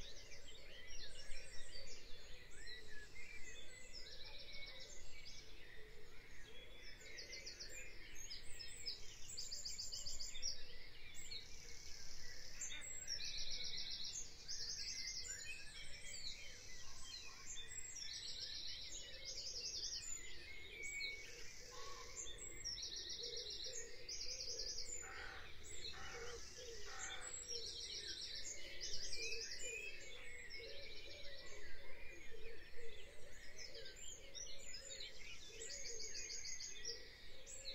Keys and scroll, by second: 1.8 F5, 16.8 F5, 26.7 F5.